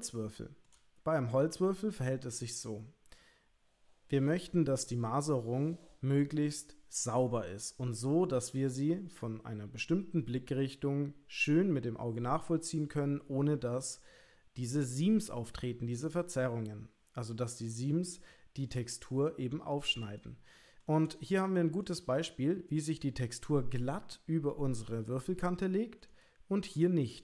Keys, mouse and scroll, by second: 17.8 shift+middle click, 19.1 middle click, 20.3 ctrl+middle click, 21.2 shift+middle click, 26.3 shift+middle click.